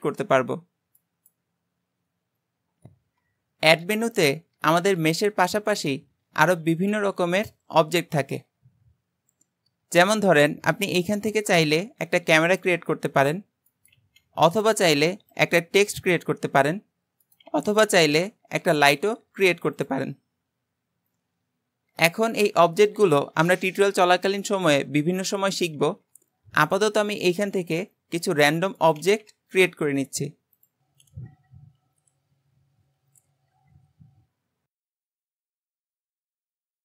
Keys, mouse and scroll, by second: 1.0 shift+right click, 3.7 shift+a, 13.7 shift+right click, 14.0 shift+a, 17.3 shift+right click, 17.5 shift+a, 25.6 shift+right click, 28.8 shift+right click, 29.0 shift+a, 31.0 shift+right click, 31.0 shift+a, 32.0 shift+right click, 32.1 shift+a, 33.1 shift+right click, 33.2 shift+a.